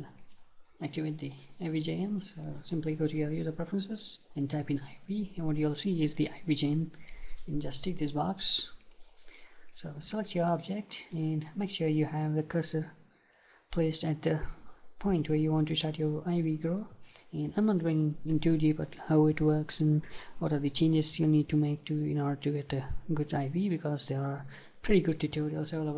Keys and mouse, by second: 0.2-3.2 drag, 9.7-25.9 middle drag.